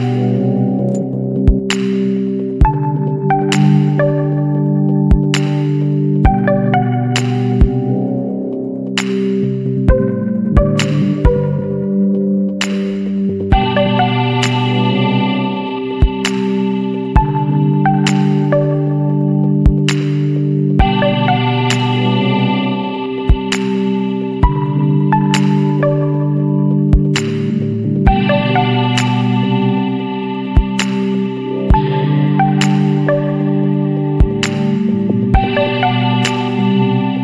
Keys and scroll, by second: 4.6 ctrl+=, 8.3 ctrl+=, 8.5 space, 8.8 space, 11.1 [, 17.0 ], 17.0 ], 17.7 space, 19.9 space, 23.9 ctrl+-, 24.0 space, 34.0 [.